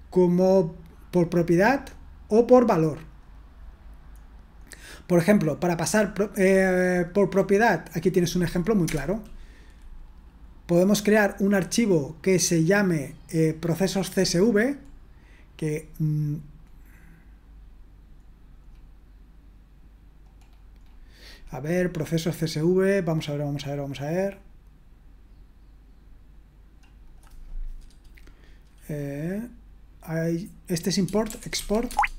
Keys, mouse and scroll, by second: 3.1-4.2 drag, 4.1-8.0 scroll down 2, 8.0-8.8 scroll down 1, 8.9 Return, 14.7-16.6 scroll down 2, 16.6-18.3 scroll down 1, 18.3-20.4 scroll down 1, 20.4-22.1 scroll up 1, 22.1-24.2 scroll down 1, 24.2-25.8 scroll down 1, 27.0-31.3 drag, 31.3-31.6 typing, 31.9 Tab.